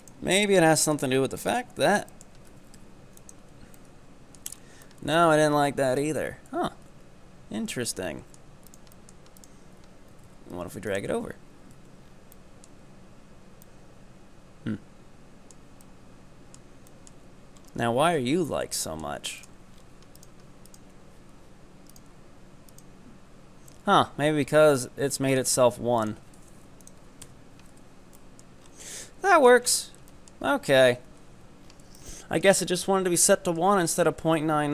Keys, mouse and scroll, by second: 0.1 right click, 0.3-0.9 scroll down 6, 0.9 right click, 1.6 ctrl+right click, 1.9 scroll up 3, 2.2 shift+middle click, 2.6 e, 3.5 Tab, 3.8-4.6 middle drag, 4.6 scroll up 4, 4.8-6.5 middle drag, 6.5 ctrl+z, 7.0 ctrl+z, 7.7-8.8 middle drag, 8.8 right click, 9.0-9.5 middle drag, 9.5 right click, 10.2 g, 11.1 Tab, 11.8 Tab, 12.0-12.3 scroll down 4, 12.3 middle click, 12.8 Tab, 13.7-17.2 middle drag, 17.2 Tab, 17.6 scroll up 4, 18.2-18.5 scroll down 2, 18.5-19.4 middle drag, 19.7-20.3 scroll up 4, 20.3 right click, 20.7 ctrl+right click, 22.0 right click, 22.7 ctrl+right click, 24.5-25.4 scroll down 2, 25.4 right click, 26.8-27.8 drag, 27.8 Tab, 28.2-28.7 middle drag, 28.7-29.0 scroll up 3, 29.0-29.7 middle drag, 29.7 scroll up 6, 30.1-30.7 middle drag, 30.7 Tab, 31.1 Tab, 31.3-32.0 scroll down 13, 32.0-32.5 middle drag, 32.5-33.2 scroll down 9, 33.2-34.7 middle drag.